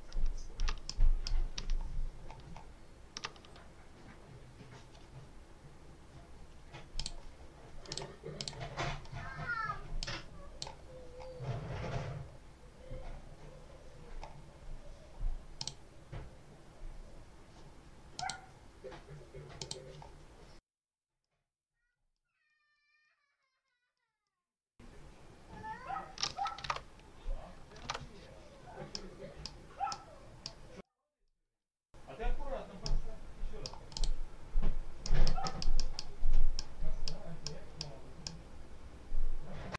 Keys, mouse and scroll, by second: 0.7 ctrl+click, 1.9 ctrl+scroll down 1, 2.9 ctrl+scroll down 1, 6.9 click, 7.8 click, 8.3 click, 9.9-10.7 drag, 12.2 scroll up 1, 13.5 scroll up 1, 13.9 scroll down 1, 15.5 click, 18.1 click, 19.5 click, 21.1-22.2 middle drag, 22.3 middle click, 22.9 middle click, 23.9 ctrl+click, 24.1-26.3 ctrl+drag, 26.5 ctrl+alt+Tab, 27.7 alt+Tab, 28.8 click, 29.8 click, 30.7 click, 32.7-33.7 drag, 34.9-36.1 drag, 36.5 click, 37.3 click, 38.1-39.7 middle drag.